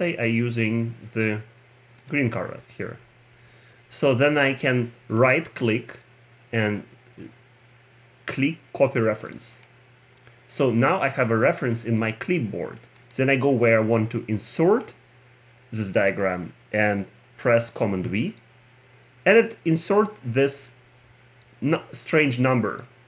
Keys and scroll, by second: 17.9 super+v.